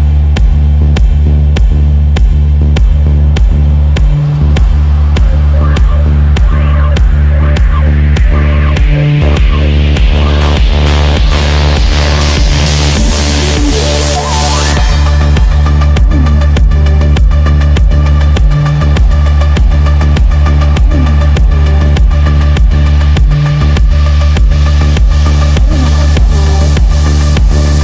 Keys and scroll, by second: 7.6 shift+Page_Down, 13.2 shift+F2, 13.5 F3, 27.4 F3.